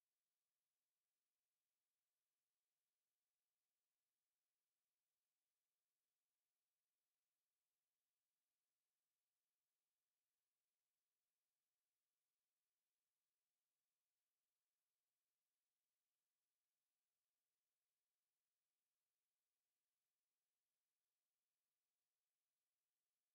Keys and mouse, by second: 4.1 alt+click, 4.8 click, 6.0 click, 7.6 alt+click, 8.3 right click, 9.7 click, 10.1 alt+click, 11.0 shift+click, 11.5 alt+click, 12.0 alt+click, 12.9 alt+click, 13.4 alt+click, 14.1 alt+click, 15.2 alt+click, 15.8 alt+click, 16.3 alt+right click, 16.7 alt+click, 17.1 alt+right click, 17.5 alt+middle click, 18.0 alt+click, 18.4 shift+right click, 20.6 ctrl+click, 21.8 ctrl+click.